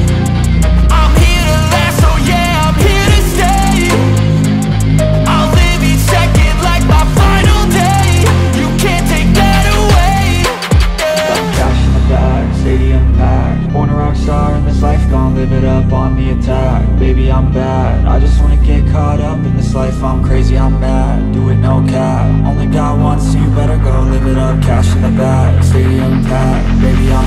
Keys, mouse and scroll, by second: 8.3 right click, 9.5-10.1 scroll down 1, 10.1 double click, 10.2-12.0 scroll down 1, 12.0 right click, 19.2-20.4 scroll up 1, 20.8 alt+click, 21.3 alt+scroll up 1, 22.0 scroll up 1, 22.0 alt+click, 24.1 alt+click, 24.8-26.6 scroll up 1, 26.7 alt+click.